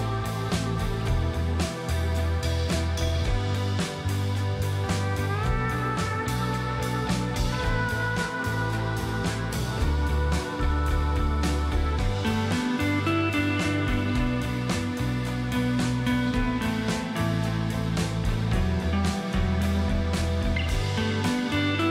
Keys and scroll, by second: 11.3 ctrl+a, 15.5 End, 15.7 Delete, 15.9 End.